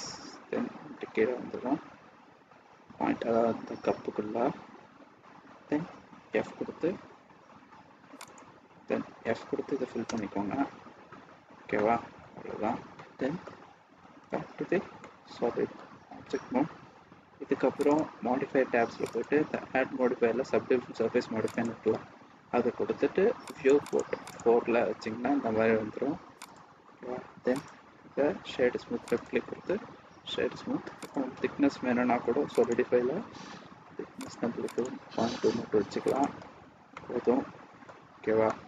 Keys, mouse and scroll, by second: 3.2 e, 9.1 f, 10.1 Return, 11.7 middle click, 12.4-12.8 scroll down 3, 12.9 middle click, 14.1 Tab, 15.0 middle click, 17.8 click, 19.0 click, 23.5 click, 23.8 click, 24.2 click, 26.3 click, 27.5 right click, 30.9 click, 34.1 click, 34.7 click, 36.9 middle click, 38.3 middle click.